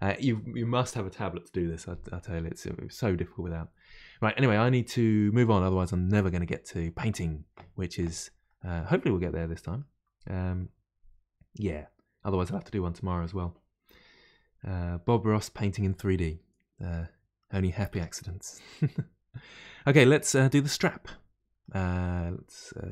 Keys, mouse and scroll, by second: 8.5-11.5 middle drag, 11.7-14.7 shift+middle drag, 16.9-17.9 middle drag, 17.9 Tab, 18.2-22.9 middle drag.